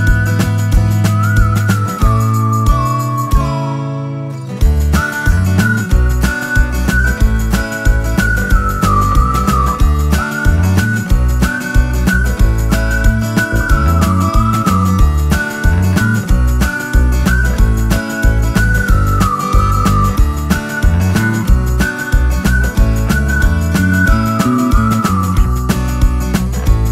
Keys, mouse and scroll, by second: 2.1 alt+click, 7.7 Return, 9.5 shift+Left, 10.4 Up, 11.2 Left, 13.4 Up, 16.1 Down, 16.4 Right, 21.5 click, 24.8 click.